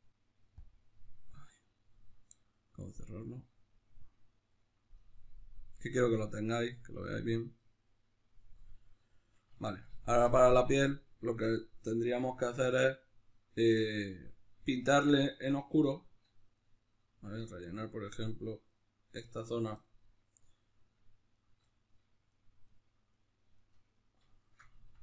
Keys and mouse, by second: 9.1-15.5 shift+middle drag, 15.5-21.7 right drag, 21.7 middle click, 22.3 shift+right click, 24.1-25.0 middle drag.